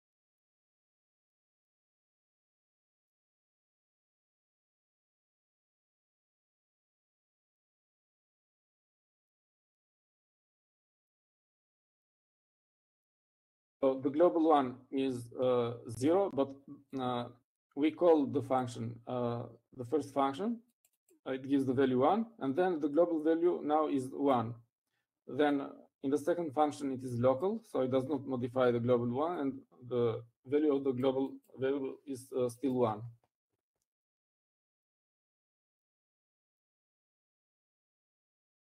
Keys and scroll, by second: 0.3 Right, 8.1 Escape, 8.5-9.8 typing, 11.9 shift+Up, 12.4 Up.